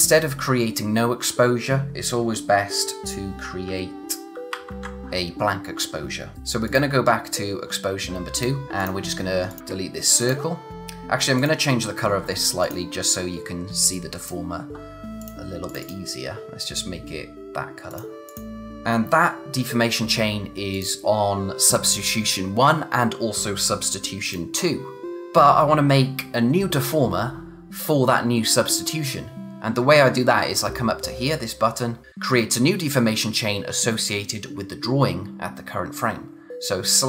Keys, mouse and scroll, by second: 4.5 alt+shift+r, 6.6 click, 11.3 click, 20.7 click, 24.2 click.